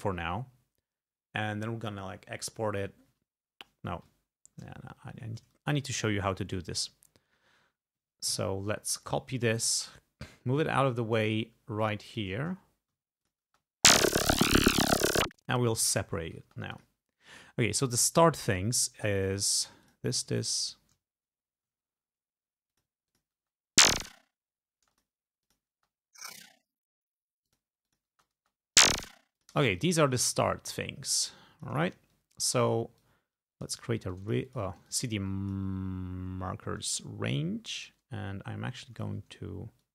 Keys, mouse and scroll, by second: 4.8 ctrl+scroll down 2, 5.8-6.8 ctrl+drag, 6.8 ctrl+scroll down 2, 7.6 ctrl+scroll down 2, 9.1 click, 10.0-11.4 drag, 12.1 click, 12.6-13.1 ctrl+scroll up 2, 13.3 ctrl+click, 13.5 ctrl+space, 14.1 ctrl+click, 14.4 ctrl+scroll up 2, 15.3-15.8 ctrl+scroll down 4, 15.9 ctrl+scroll up 2, 16.5 ctrl+space, 16.7 ctrl+click, 19.0 click, 19.9 ctrl+click, 21.2 ctrl+scroll up 2, 22.7 click, 23.1 click, 23.4 space, 24.8 space, 25.0 click, 25.5 click, 25.8 space, 27.5 click, 27.9 click, 28.2 space, 29.4 click, 29.6 space, 29.8 click, 30.4 ctrl+scroll down 2, 31.1 ctrl+click, 32.3 ctrl+scroll up 2, 33.1 ctrl+click, 34.3 ctrl+click, 34.9 ctrl+click, 37.9-39.4 drag, 39.8 click.